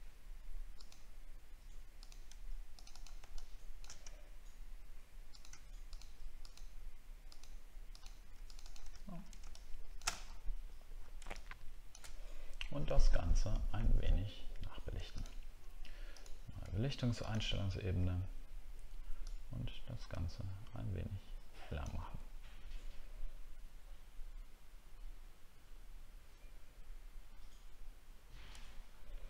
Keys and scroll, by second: 9.0 alt+scroll down 1, 10.2 alt+scroll down 7, 28.5 alt+scroll up 1.